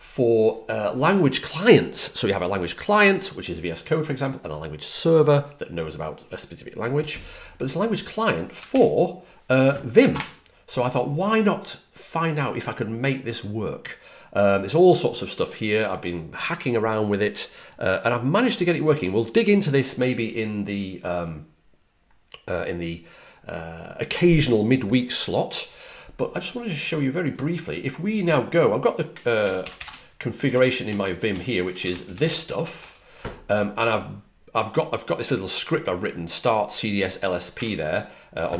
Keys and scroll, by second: 8.6 super+0, 10.0 space, 29.3-32.7 typing, 37.2-38.1 typing.